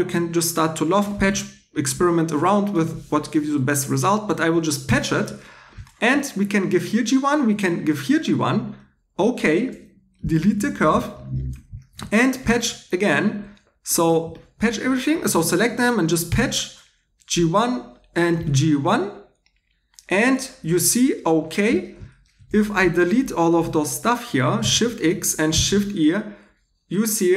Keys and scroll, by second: 4.9 shift+3, 9.7 2, 10.4 x, 11.3 Tab, 12.0 2, 16.3 shift+3, 22.5 3, 24.6 shift+x, 25.5 shift+e.